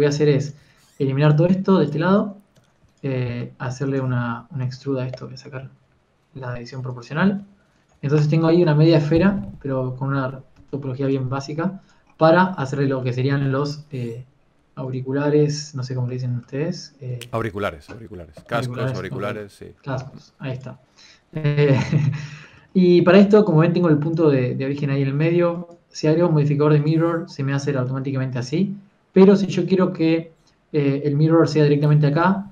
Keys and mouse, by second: 0.2 g, 0.2 g, 0.5 Tab, 1.0 z, 1.2 b, 4.6 Tab, 4.6 x, 4.6 e, 10.8 click, 11.1 alt+m, 11.1 Tab, 11.1 z, 11.1 KP_1, 14.1 s, 14.1 g, 15.2 g, 17.9 click, 19.3 KP_1, 20.8 s, 24.2 g, 24.8 g, 25.4 g, 29.1 g.